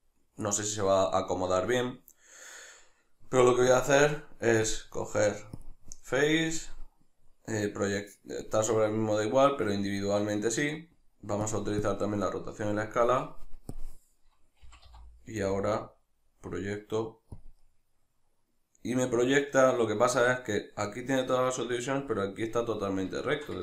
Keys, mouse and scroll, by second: 14.6 g, 17.5 click, 17.6-23.6 middle drag.